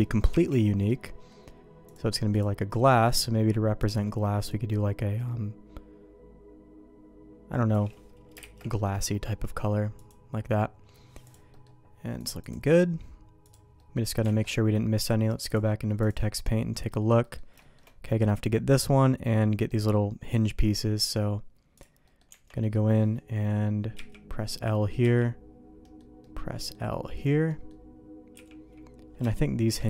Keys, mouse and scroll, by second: 0.3 l, 0.8 middle click, 1.9 click, 8.4 shift+k, 8.8 middle click, 10.0 click, 11.2 click, 11.5 middle click, 12.2 click, 12.4-13.5 drag, 13.7 middle click, 14.4 alt+a, 14.9 click, 16.0 click, 16.4 middle click, 17.2 middle click, 17.6 shift+middle click, 18.7 middle click, 19.7 middle click, 21.0 click, 22.0 middle click, 22.3 Tab, 22.6 middle click, 23.9 l, 25.0 l, 25.9 middle click, 26.2 middle click, 26.7 click, 27.5 middle click, 28.3 click, 29.3 shift+middle click.